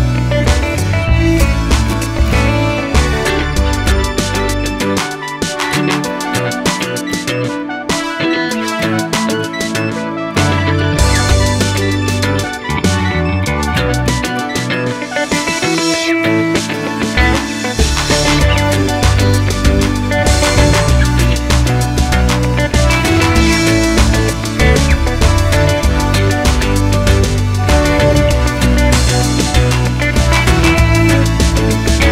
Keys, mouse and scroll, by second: 0.6 click, 0.9 shift+click, 1.2 shift+click, 1.6 shift+click, 1.9 s, 2.8-3.9 middle drag, 3.5 g, 3.9 click, 4.0-5.0 middle drag, 5.4-9.0 middle drag, 9.0 click, 9.3 shift+click, 9.6 s, 10.4 click, 10.6 g, 11.3 click, 11.4-18.2 middle drag, 13.4 Tab, 14.5 ctrl+s, 18.2 click, 19.2 shift+d, 20.0 right click, 20.7 g, 22.0 click, 22.1 middle click, 22.6 Tab, 22.8 scroll up 1, 23.2 shift+middle click, 23.5-24.3 scroll down 1, 24.7 a, 25.2 l, 26.7 3, 27.1 l, 27.8-32.1 middle drag, 28.3 Tab, 28.5-29.4 scroll down 1, 29.7 shift+scroll down 1, 32.0 Tab.